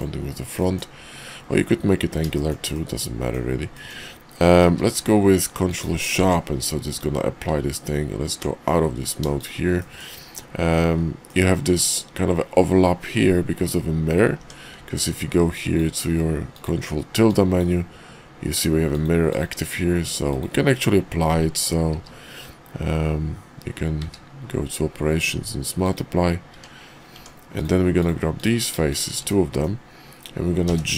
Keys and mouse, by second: 0.5 middle drag, 2.3 shift+middle drag, 2.7-3.3 middle drag, 3.7 middle click, 4.6 q, 6.2 Tab, 6.8 click, 7.5 Tab, 9.8 shift+click, 11.3 click, 14.3 Tab, 14.9 ctrl+`, 21.9 q, 24.0 q, 26.5 Tab, 27.1 Tab, 27.5 click, 27.9 click, 28.3 click, 28.8 shift+click, 29.3 middle click, 30.6 g.